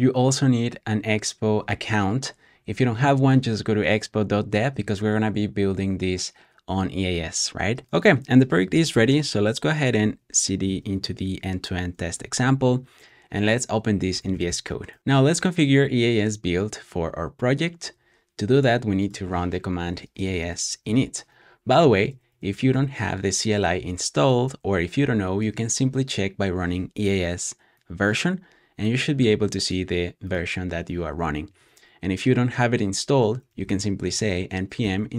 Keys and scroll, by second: 8.4-10.8 typing, 12.0 typing, 13.8-15.1 typing, 19.5-23.1 typing, 24.2-25.4 typing, 33.2-35.1 typing.